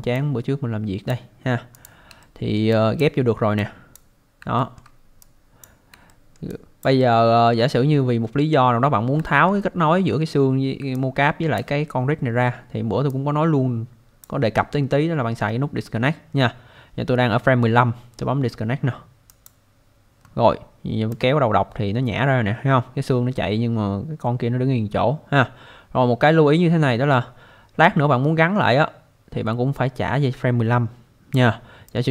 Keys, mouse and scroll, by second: 0.2 click, 1.7 click, 2.2 alt+middle click, 2.7 alt+click, 3.6 click, 4.6 alt+middle click, 5.2 click, 6.1 alt+middle click, 6.5 alt+click, 7.0 alt+middle click, 9.2 alt+middle click, 10.9 alt+click, 13.1 click, 19.3 click, 21.1 click, 31.9 click.